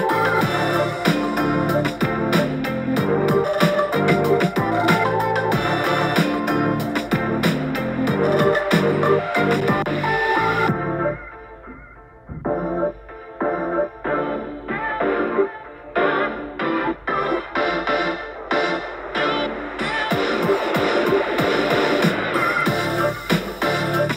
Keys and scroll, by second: 0.1 super+j, 0.5 super+t, 3.6 b, 6.3 super+t, 12.3 super+t, 12.4 Page_Down, 12.4 Page_Down, 12.6 Page_Down, 16.7 super+z, 16.8 x, 18.3 super+t, 22.0 super+z, 22.1 x, 22.7 super+z.